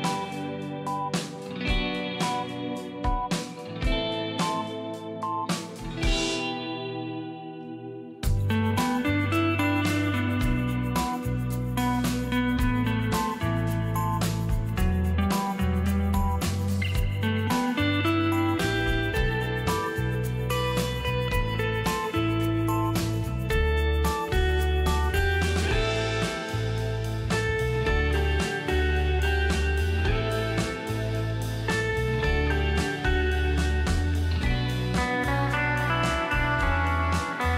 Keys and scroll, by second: 20.7 space, 28.9 space.